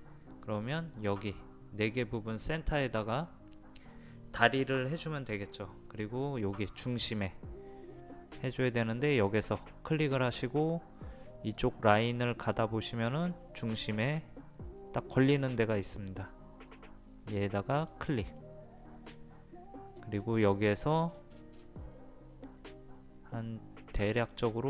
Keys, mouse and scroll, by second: 9.3 click, 18.4-19.8 middle drag, 20.4-24.6 drag.